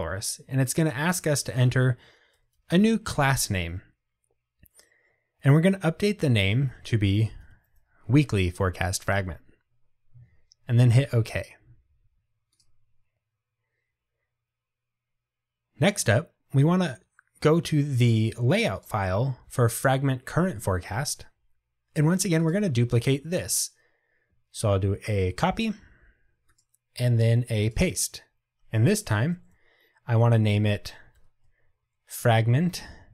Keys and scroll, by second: 1.7 Delete, 18.9 super+b, 25.5 super+c, 27.9 super+v, 31.2 Delete.